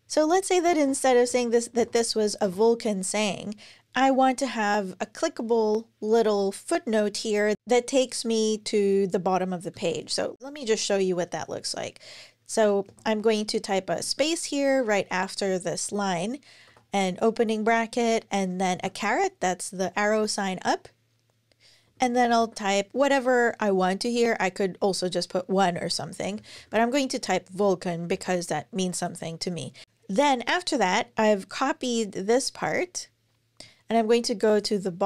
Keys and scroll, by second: 0.4 shift+super+Left, 1.1 BackSpace, 2.2 BackSpace, 12.7 BackSpace, 13.8 space, 16.5 [, 20.6-22.7 typing, 25.7 Right, 26.2 alt+shift+Left, 26.3 alt+shift+Left, 26.5 alt+shift+Left, 27.9 super+c, 32.4 super+c.